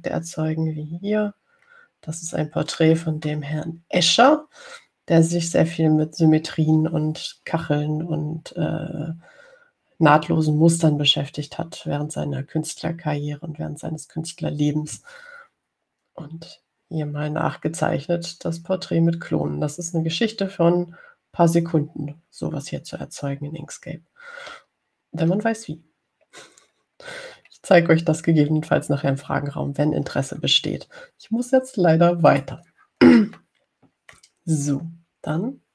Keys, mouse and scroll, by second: 0.5 ctrl+scroll up 2, 1.7 ctrl+scroll up 2, 2.9 ctrl+scroll up 2, 4.5-5.7 drag, 27.5-28.2 ctrl+scroll down 4, 28.7-29.0 ctrl+scroll down 2, 30.5 ctrl+scroll down 2, 33.5 click, 34.6-35.7 middle drag.